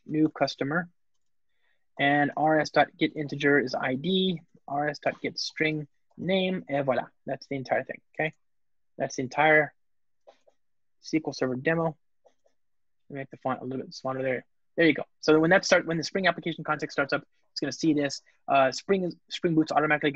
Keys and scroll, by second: 1.2 alt+shift+Left, 1.3 Return, 6.6 alt+super+l, 8.0 alt+Return.